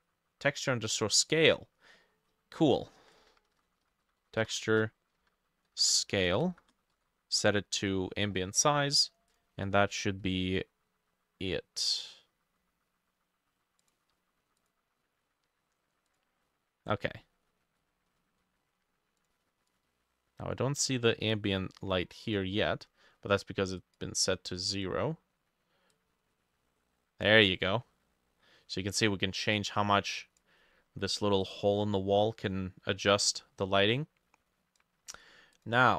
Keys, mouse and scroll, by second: 3.2 ctrl+shift+middle click, 3.5 ctrl+shift+Left, 3.6-7.0 typing, 4.6 shift+middle click, 9.9 ctrl+s, 19.7 double click.